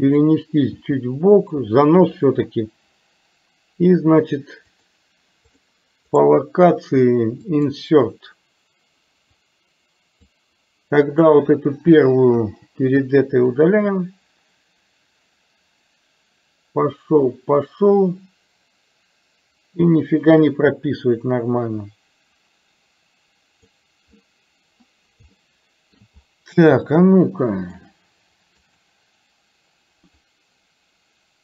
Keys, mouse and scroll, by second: 4.7-5.7 drag, 6.2-7.8 right drag, 9.4 click, 11.2 click, 12.4 Delete, 13.6-23.8 drag, 25.4-26.1 shift+middle drag, 27.1-27.8 shift+middle drag, 28.7 click, 30.4-31.4 drag.